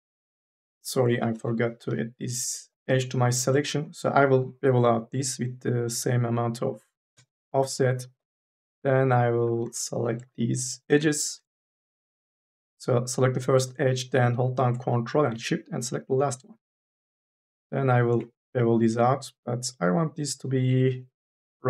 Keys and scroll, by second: 1.3 2, 4.0 m, 4.3 s, 8.6 3, 9.3 2, 9.5 e, 17.9 m, 18.2 s.